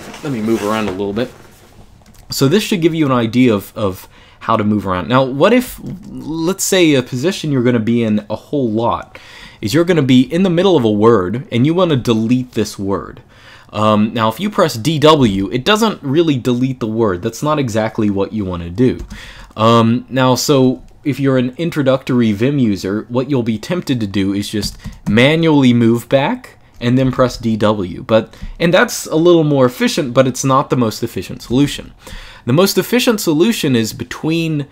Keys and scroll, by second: 5.4 j, 5.6 j, 5.8 j, 6.0 j, 9.4-10.8 typing, 14.7-15.7 typing, 18.8 Escape, 18.9 u, 24.3-24.8 typing, 26.5-27.4 typing, 31.3 Escape, 31.4 u.